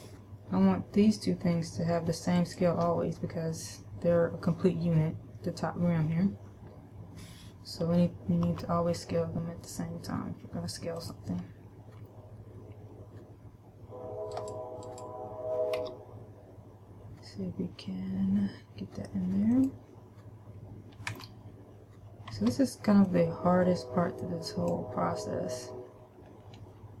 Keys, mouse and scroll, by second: 2.7 shift+right click, 8.8 s, 11.5 click, 14.7 right click, 15.3 right click, 16.3 g, 20.0 click, 21.5 a, 22.7 b, 26.5-27.0 scroll up 1.